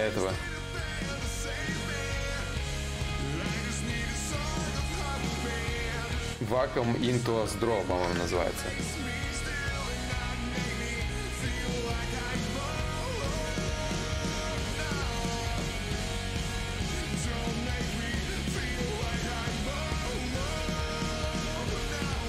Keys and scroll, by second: 0.4 ctrl+z, 0.4 y, 9.4 ctrl+z, 9.4 y, 11.8 ctrl+z, 11.8 y, 16.6 ctrl+z, 16.6 ctrl+y.